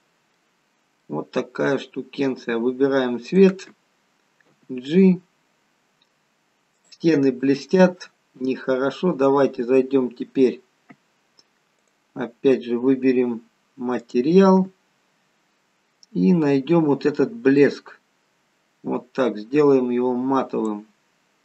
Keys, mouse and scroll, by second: 0.7-2.0 scroll up 2, 1.1 middle click, 3.4 click, 4.6 g, 8.9-9.9 scroll down 2, 12.0 click, 14.1 click, 15.1-15.8 scroll down 3, 15.8-17.6 scroll down 6, 17.7 click, 21.3-21.4 scroll up 4.